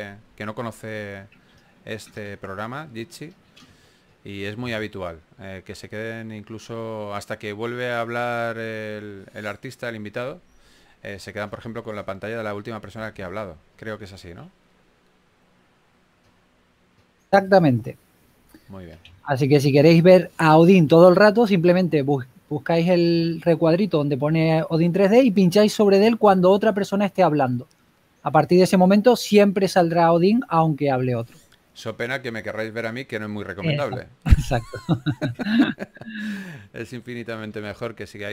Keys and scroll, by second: 1.3-2.0 typing, 8.8-10.4 typing, 11.9 s, 15.0-15.7 typing, 19.2 typing, 23.8 s, 26.4-27.2 typing, 37.4-38.3 typing.